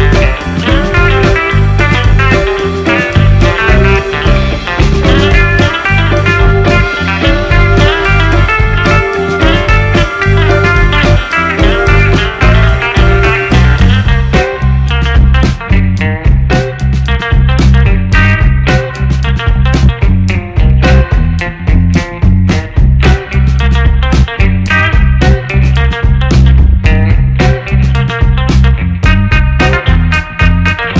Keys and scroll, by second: 0.9-1.9 typing, 8.6 Delete, 11.5 ctrl+space, 15.6-18.9 typing, 20.2 space, 20.6 shift+b, 20.8 f, 21.0 o, 23.0 shift+a, 26.5 1, 26.7 6, 26.9 Return, 29.2 1, 29.4 Return, 30.6 1.